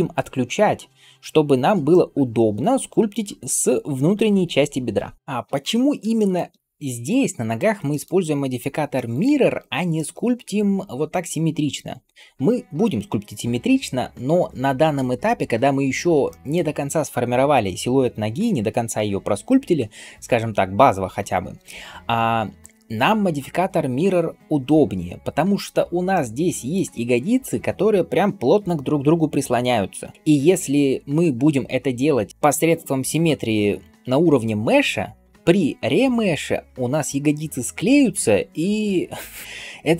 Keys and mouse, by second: 6.2-7.6 right drag, 7.9 right click, 9.0-16.0 middle drag, 16.4-39.9 middle drag.